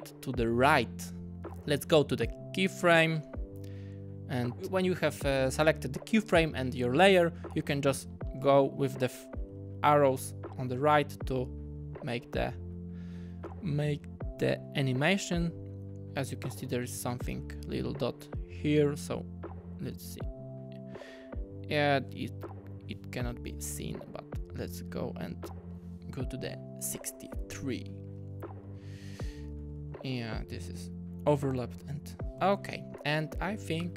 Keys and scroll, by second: 4.6 Tab, 7.3 Tab, 7.4 Tab, 7.6 Tab, 8.2 Tab, 8.3 Tab, 8.5 Tab, 10.6 Right, 10.7 Right, 10.8 Right, 12.1 Left, 12.3 Left, 12.6 Left, 26.9-27.6 typing, 29.2-29.9 typing, 32.2 alt+Right, 32.4 typing, 33.8 space.